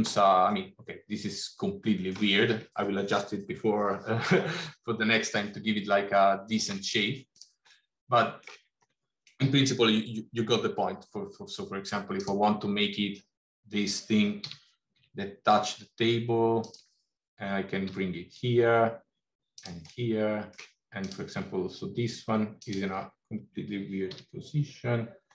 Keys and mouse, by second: 0.3-2.0 middle drag, 6.0 middle click, 7.2 click, 7.8 middle click, 14.3 g, 18.0 r, 19.8 middle click, 22.5 click, 23.9 r.